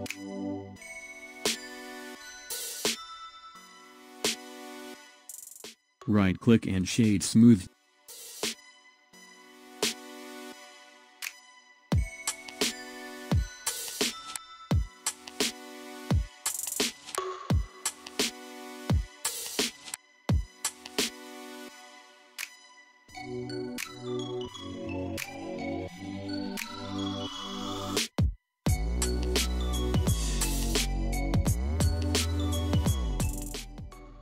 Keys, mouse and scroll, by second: 2.0 click, 3.6 click, 5.6 click, 8.6-11.6 middle drag, 11.7-12.3 scroll down 7, 12.3-13.1 middle drag, 13.1 click, 13.8-16.8 middle drag, 19.6-20.2 scroll up 1, 20.2 scroll up 3, 20.8-21.5 shift+middle drag, 21.5-22.4 scroll up 2, 22.4 click, 24.0 s, 27.6-30.6 middle drag, 32.1 click, 32.8-33.8 scroll down 1, 33.8 click.